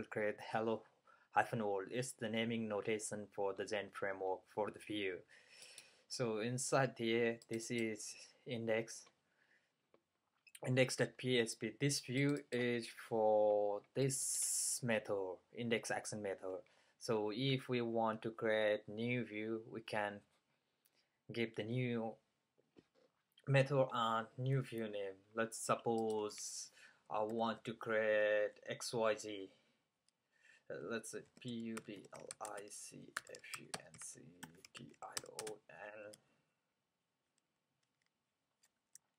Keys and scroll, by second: 31.1-35.7 typing.